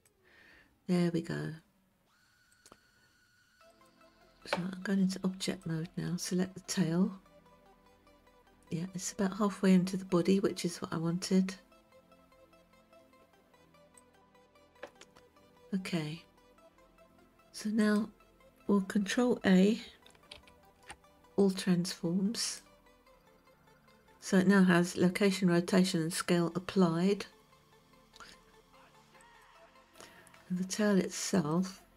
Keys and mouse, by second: 2.6-4.6 drag, 5.6 click, 14.0 click, 17.8 click, 20.4 ctrl+a, 29.2 click, 31.4-31.9 drag.